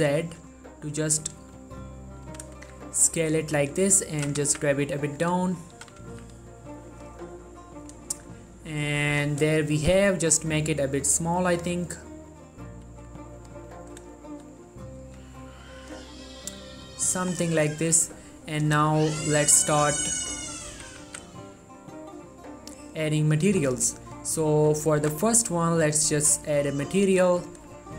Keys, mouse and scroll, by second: 0.2 shift+z, 1.4 right click, 2.4 s, 2.7 shift+z, 3.6 click, 3.9 middle click, 4.1 scroll up 1, 4.3 g, 4.6 z, 5.2 click, 5.5 middle click, 5.7 scroll up 1, 5.9 g, 6.2 z, 7.1 click, 7.4 scroll down 1, 7.6 middle click, 8.3 shift+click, 8.6 scroll up 1, 8.7 middle click, 9.9 s, 11.6 click, 12.0 middle click, 12.5-13.0 scroll down 1, 13.0 s, 13.5 click, 13.9 middle click, 15.1 s, 15.9 click, 16.2-17.6 middle drag, 17.6 click, 17.9 middle click, 18.0-18.7 scroll up 1, 18.7 click, 18.9 shift+middle click, 19.7-20.4 scroll up 1, 20.4 click, 20.6 scroll up 1, 20.9 g, 21.2 z, 22.9 click, 23.4 ctrl+middle click, 24.0 middle click, 24.0 scroll up 1, 24.2 click, 24.5-24.9 scroll down 1, 24.9 middle click, 25.1 ctrl+middle click, 26.0 click.